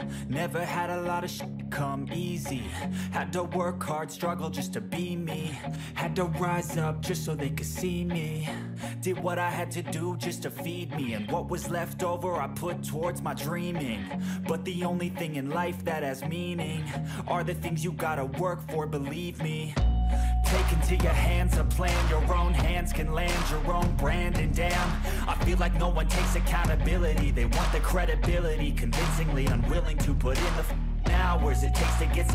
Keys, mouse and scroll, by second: 8.7 a, 8.8 d, 9.6 ctrl+a, 13.6 1, 13.8 5, 14.1 2, 14.4 0, 16.2 2, 16.3 3, 16.5 5, 16.6 7, 18.3 typing.